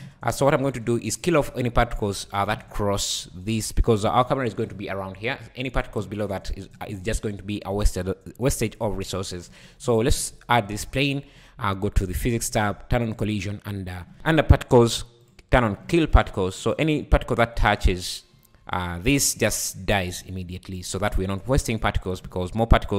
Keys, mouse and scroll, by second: 0.2 scroll down 4, 0.6 shift+a, 1.0 click, 1.8 s, 2.7 `, 3.0 scroll up 2, 3.7-4.7 scroll up 5, 5.3-6.0 scroll down 7, 7.5 scroll down 1, 7.9-8.4 scroll up 4, 8.8 `, 9.3-9.7 scroll up 2, 12.1 click, 13.1 click, 14.7-16.6 drag, 16.6 shift+right click, 17.0 scroll down 2, 17.6 space, 17.9-18.3 scroll down 3, 19.7 scroll up 4, 20.8 scroll up 2, 21.4 `, 21.9 middle click.